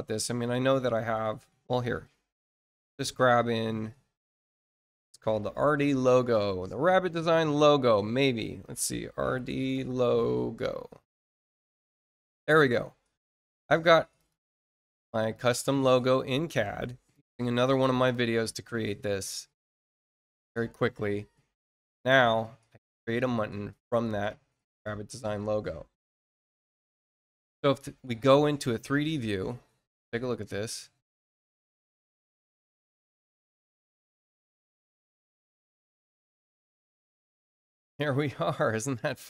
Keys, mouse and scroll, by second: 0.3 click, 3.8 click, 8.1 click, 12.3 click, 14.1 click, 15.1 click, 16.4 shift+click, 18.1-19.7 ctrl+drag, 21.9 click, 23.6 click, 26.8 click, 29.1 click, 29.9 click.